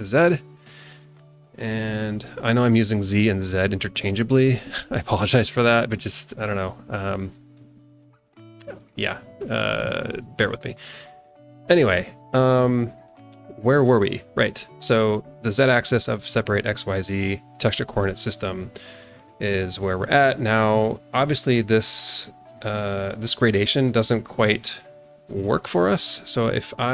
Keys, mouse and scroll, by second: 0.2-0.7 drag, 1.1-2.7 drag, 3.1 click, 4.0 click, 5.0 click, 5.6 click, 6.9 click, 8.0 click, 8.8 click, 9.4-9.8 scroll up 1, 10.0 scroll down 2, 10.3 shift+middle click, 11.7 click, 12.5 click, 12.8 click, 15.9 scroll up 1, 16.4 shift+middle click, 18.9 scroll up 1, 19.2 shift+middle click, 20.8-22.1 alt+middle drag, 22.5 scroll down 1, 24.5 middle click, 25.0 scroll down 2, 25.4 alt+shift+middle click, 26.1 alt+shift+middle click.